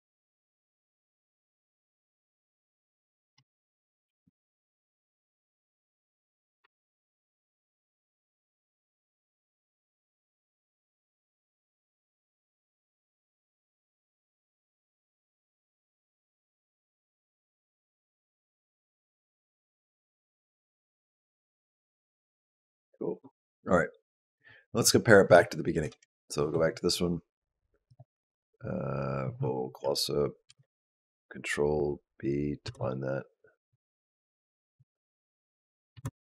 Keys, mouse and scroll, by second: 0.3 space, 3.2 space, 3.9 g, 5.2 g, 6.5 space, 22.1 space, 25.7 shift+Down, 27.7 click, 30.3 ctrl+b, 32.5 space, 35.8 space.